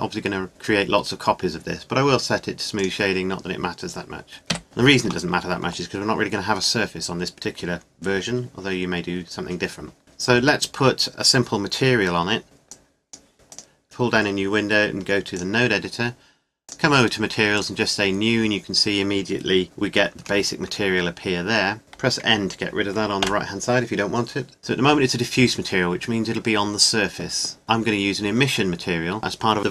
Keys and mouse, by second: 2.8-4.4 middle drag, 4.4 click, 4.5 KP_1, 12.7-14.6 middle drag, 14.6 click, 16.6-19.3 drag, 23.2 n.